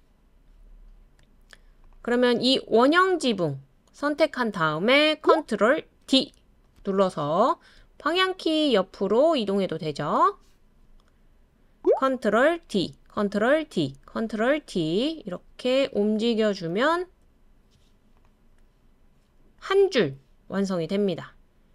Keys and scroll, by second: 6.0 super+d, 7.8 Tab, 8.3 Tab, 8.4 Tab, 8.4 Right, 8.5 Tab, 8.6 Right, 12.7 super+d, 13.6 super+d, 14.6 super+d, 15.0 super+d.